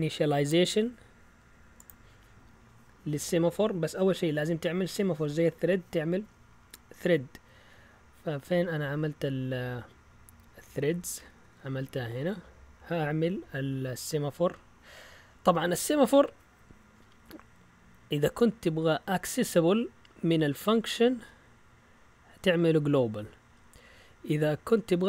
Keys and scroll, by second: 10.8 Down, 10.9-12.0 typing, 20.5-21.1 typing, 21.3 Up, 22.3-23.0 typing, 24.3-25.0 typing.